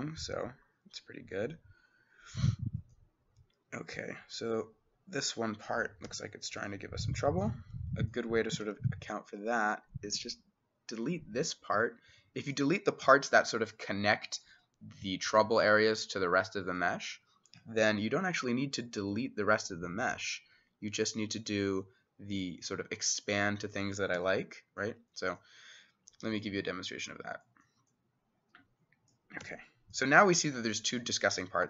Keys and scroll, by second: 0.0-1.2 typing, 1.5 Escape, 6.1 c, 8.2 Escape, 8.7 s, 13.1 x, 17.8 x, 24.2 x, 29.5 x.